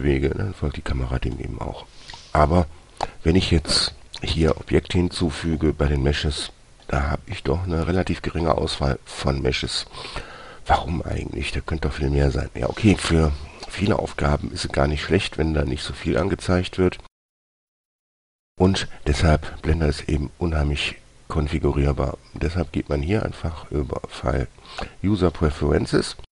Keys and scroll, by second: 0.0 g, 4.9 shift+a.